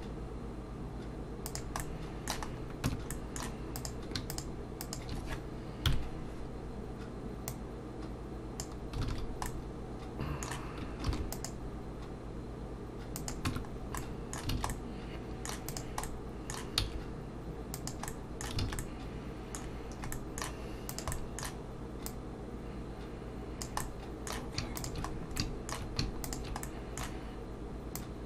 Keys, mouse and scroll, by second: 1.8 middle click, 2.5-3.1 scroll up 3, 2.9 Tab, 3.1 middle click, 3.8 click, 4.3 shift+click, 4.8 click, 5.9 KP_1, 7.5 click, 9.1 alt+a, 9.5 middle click, 11.1 ctrl+r, 13.5 Tab, 13.7-14.1 scroll down 2, 14.0 middle click, 14.5 alt+a, 14.7 middle click, 15.7 click, 16.0 middle click, 16.8 s, 18.1 middle click, 18.6 alt+a, 18.8 middle click, 19.7-20.1 scroll down 2, 20.1 middle click, 20.9 click, 21.1 middle click, 22.1 click, 23.8 middle click, 24.8 shift+click, 25.1-25.4 scroll down 2, 25.4 middle click, 26.2 shift+click, 26.6 middle click.